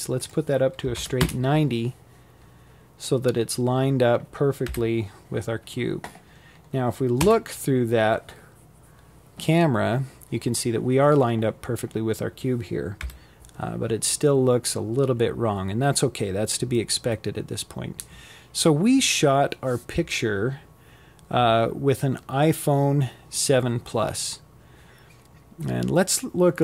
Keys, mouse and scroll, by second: 0.8-1.5 scroll up 4, 1.5 scroll down 4, 2.3 KP_7, 4.1-4.8 scroll up 1, 4.8 KP_0, 10.6 KP_7.